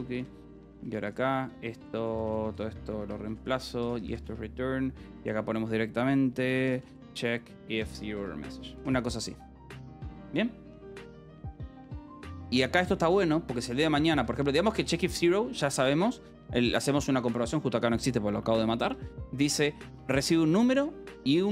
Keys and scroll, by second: 0.0-4.6 typing, 6.1-7.3 typing, 8.1 Escape, 9.3 ctrl+s, 9.6 h, 10.7 h, 11.5 a, 11.6 BackSpace, 11.7 Escape, 12.1 k, 12.9 ctrl+s, 13.6-15.9 typing, 14.0 Escape, 17.1 shift+l, 18.9 Escape, 19.6 k, 20.2 j.